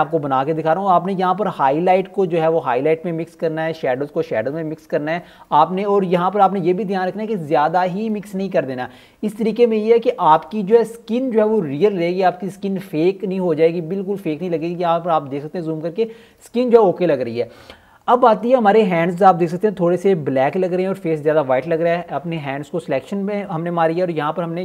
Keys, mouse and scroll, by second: 0.0-3.5 typing, 0.3 click, 1.0-1.4 scroll down 2, 1.5 click, 1.9 click, 2.2 click, 2.9 click, 3.1 click, 3.4 click, 3.6 scroll up 1, 3.9 scroll down 1, 4.1 ctrl+alt+scroll up 1, 4.3 click, 4.9 scroll down 1, 4.9 alt+scroll up 1, 5.1 click, 5.4-7.7 typing, 6.1 scroll down 1, 6.2 click, 6.4 scroll up 1, 6.7 scroll down 1, 7.3 click, 7.6 scroll down 1, 7.7 click, 8.8 scroll down 1, 8.9 click, 9.2-13.8 typing, 9.6 ctrl+alt+scroll down 1, 9.8 ctrl+alt+scroll up 1, 9.9 click, 10.2-10.6 scroll down 2, 10.4 click, 10.7 click, 11.2 click, 12.6 click, 12.7 alt+scroll down 1, 12.9 alt+scroll up 1, 13.0 click, 13.8 click, 14.0-14.6 scroll down 2, 14.2 click, 14.8 ctrl+alt+scroll up 1, 15.1 ctrl+alt+scroll down 1, 15.2-15.7 ctrl+alt+scroll up 2, 15.3 alt+click, 15.7-16.1 scroll down 1, 24.3 click.